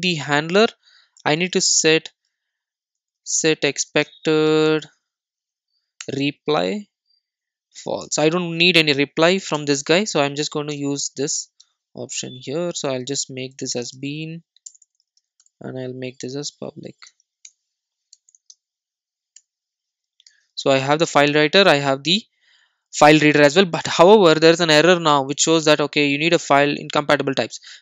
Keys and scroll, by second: 0.2 super+c, 1.3 super+c, 1.4 super+v, 6.1 Return, 10.7 Return, 12.7 alt+super+l, 15.4 Return, 20.4 super+s.